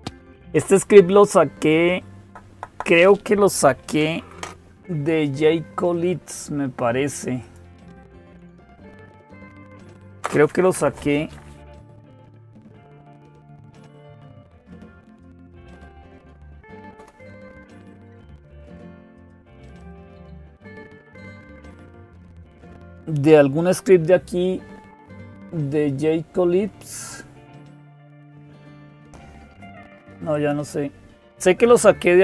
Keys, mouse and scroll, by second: 7.2 click, 9.5 click, 12.7-15.3 typing, 16.5 Down, 16.8 Return, 21.7 click, 24.8-29.1 scroll down 1, 29.1-30.1 scroll down 1, 30.1 click.